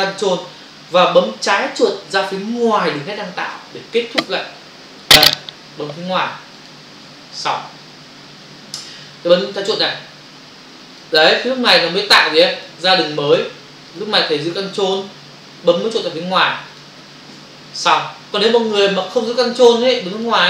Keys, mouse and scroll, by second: 6.5 ctrl+click, 10.9 click, 11.8 click, 11.9 double click, 12.6 click, 12.7 click, 13.2 click, 13.4 double click, 13.8 click, 14.0 click, 14.4 click, 14.6 double click, 16.6 ctrl+click, 16.8 ctrl+click, 18.5 click, 18.6 click, 19.0 click, 19.2 click, 19.6 double click, 20.2 click.